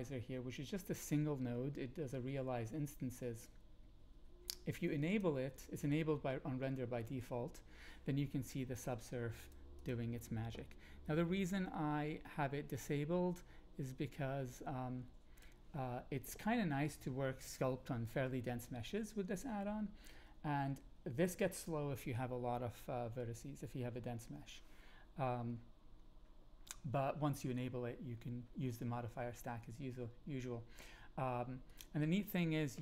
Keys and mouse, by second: 5.1-9.5 drag, 9.8 click, 11.4-15.4 drag, 31.7-32.8 drag, 31.7-32.8 right drag.